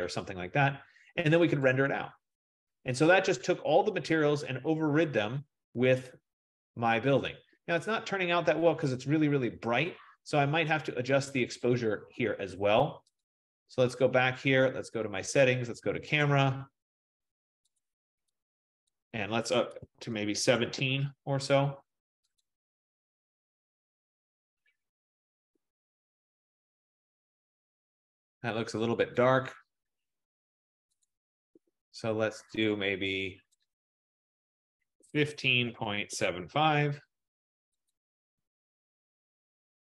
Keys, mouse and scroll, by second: 1.7 click, 6.7 click, 11.7 click, 13.4 click, 15.5 click, 16.3 click, 18.0 click, 19.0 click, 19.9-20.2 typing, 20.7-23.9 Tab, 22.5 click, 29.4 click, 31.2 click, 32.8 click, 33.7 click, 34.0 F15, 34.8-37.0 typing, 38.1 click.